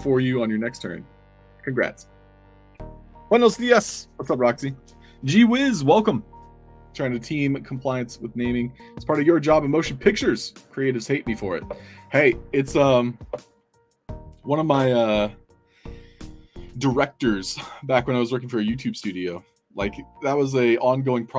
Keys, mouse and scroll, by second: 0.0-0.6 typing, 0.8-1.3 alt+drag, 1.4 alt+click.